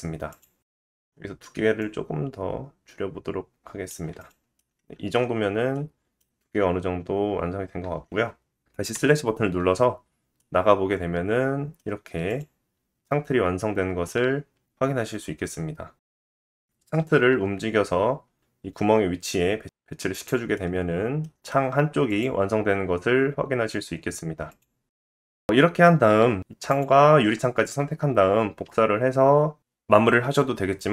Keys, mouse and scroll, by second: 0.7 click, 0.8 middle click, 1.8-4.3 drag, 4.3-10.4 middle drag, 4.5 scroll down 1, 5.4-5.7 scroll down 1, 8.9 /, 12.3 click, 15.4-18.2 middle drag, 16.8 g, 18.2 KP_1, 20.1 scroll down 1, 20.2 middle click, 20.9 g, 21.3 middle click, 22.0 middle click, 22.5 g, 23.7-24.3 middle drag, 24.3 click, 24.4-25.3 middle drag, 25.1 ctrl+shift+d, 25.3 click, 25.5 ctrl+z, 25.7 shift+middle click, 26.1 shift+middle click, 26.7 shift+click, 28.0-30.9 middle drag, 28.7 shift+d.